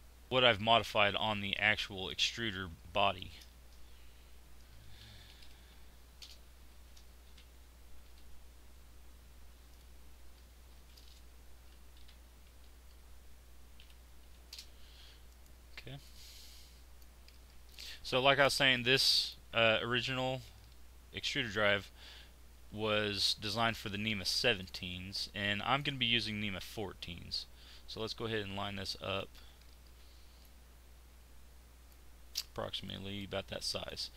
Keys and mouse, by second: 3.1 shift+r, 6.7 shift+r, 10.7 shift+r, 15.2-17.8 middle drag, 18.5-20.6 middle drag, 20.8 click, 21.6-24.7 drag, 22.5 z, 30.4-31.9 middle drag, 32.4 z.